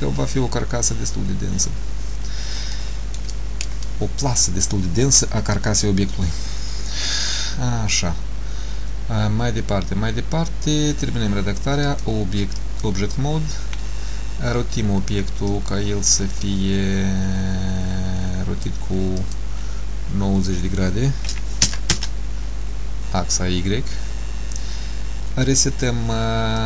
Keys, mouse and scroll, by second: 0.5-0.9 scroll up 1, 1.3 scroll down 1, 2.9 shift+middle click, 2.9 scroll down 2, 12.0 click, 15.6 click, 19.3 click.